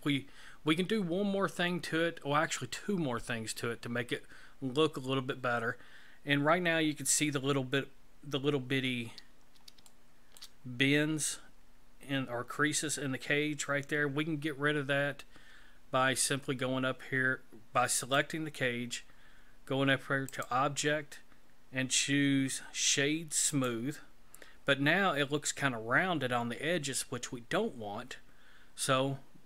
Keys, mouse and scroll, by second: 8.8-9.8 scroll up 3, 9.9 shift+middle click, 18.0 right click, 20.3 click.